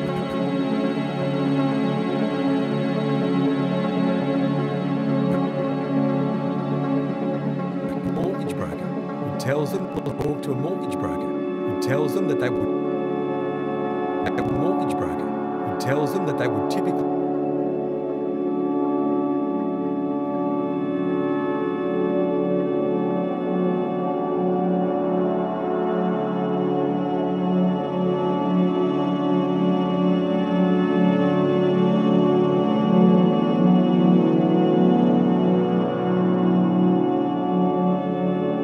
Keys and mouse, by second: 0.0-1.4 typing, 0.6 right click, 0.7-2.0 shift+drag, 2.0 right click, 2.3 click, 3.1 typing, 3.7 right click, 3.9 click, 5.1-6.1 drag, 6.1 typing, 6.9-7.7 drag, 7.9 click, 8.1 typing, 9.6-10.1 typing, 9.8 click, 12.5-14.4 typing, 12.8 click, 13.9-15.0 drag, 16.8-18.2 typing, 18.3-25.3 ctrl+alt+drag, 24.4 typing, 25.6-29.8 drag, 30.0-30.9 drag, 32.1-35.9 drag, 36.9 click, 38.1 click.